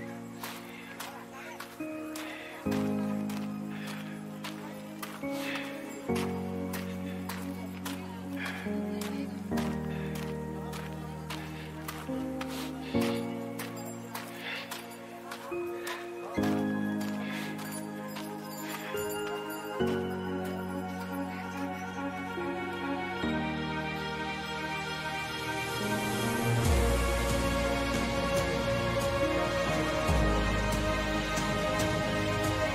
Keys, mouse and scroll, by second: 0.2 b, 4.0-5.9 drag, 6.5 e, 8.6-10.4 drag, 11.6-20.2 drag, 21.4-28.3 drag, 30.6-32.7 drag.